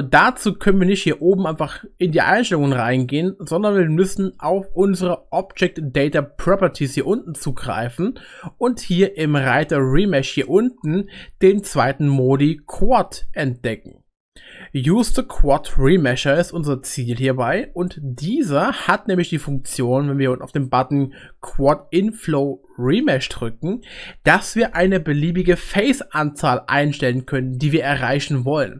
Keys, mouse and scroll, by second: 1.4-6.2 drag, 6.8-16.4 drag, 23.7-28.7 drag.